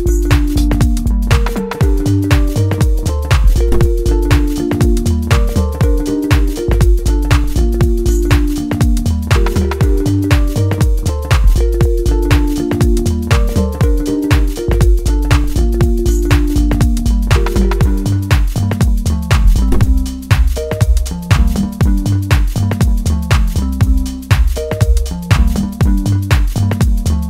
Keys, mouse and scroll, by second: 0.1-1.7 middle drag, 1.7 click, 2.3 shift+middle click, 2.9 scroll up 1, 4.1 click, 5.3-5.6 scroll up 1, 5.6-8.8 middle drag, 9.1-16.2 drag, 16.2-20.5 middle drag, 20.5-20.9 scroll down 1, 20.9-23.2 middle drag, 23.2-27.2 drag.